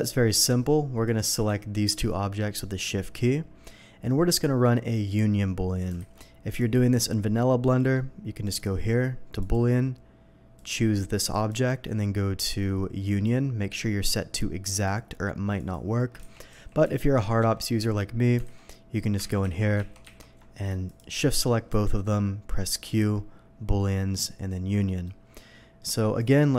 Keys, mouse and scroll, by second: 0.0-0.3 middle drag, 1.0 click, 1.8 shift+click, 2.5-2.8 shift+middle drag, 6.0 alt+a, 6.5 click, 7.7 middle drag, 8.4 click, 9.4 click, 10.6 click, 11.3 click, 13.1 click, 14.7 click, 15.6 click, 16.2 ctrl+z, 17.7 ctrl+z, 17.7 middle drag, 18.4 alt+a, 19.2 ctrl+z, 19.4 ctrl+z, 20.9 shift+click, 21.3 middle click, 22.0 ctrl+z, 22.0 q, 24.1 click, 24.9 middle click, 26.2 click.